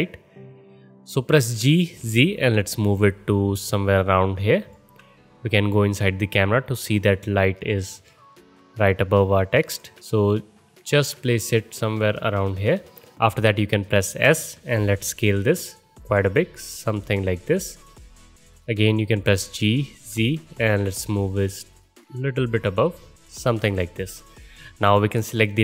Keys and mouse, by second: 1.5 g, 5.7 middle click, 5.7 KP_0, 5.9-7.1 middle drag, 7.7 g, 10.0 ctrl+g, 14.2 s, 19.3 g, 20.3-25.6 ctrl+middle drag.